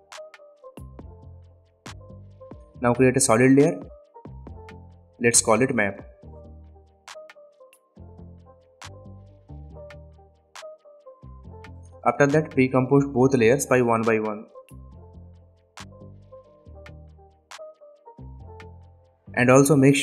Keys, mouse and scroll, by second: 2.1 right click, 4.5 click, 5.9-7.0 typing, 8.5 click, 11.7 right click, 12.5 click, 14.9 BackSpace, 16.4 click, 18.0 right click, 18.5 click.